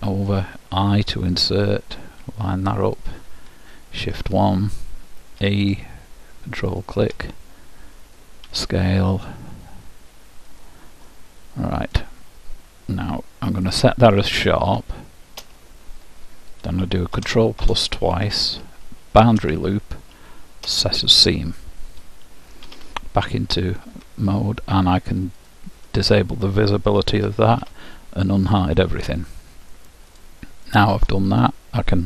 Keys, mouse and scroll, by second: 1.1 i, 5.5 e, 7.7-9.7 middle drag, 8.5 s, 11.1-13.1 middle drag, 13.8-15.5 middle drag, 15.5 ctrl+', 19.5 shift+', 22.7 z, 25.4-27.3 drag, 27.3 alt+h, 27.7 u, 29.0-30.2 middle drag, 30.2-31.9 drag.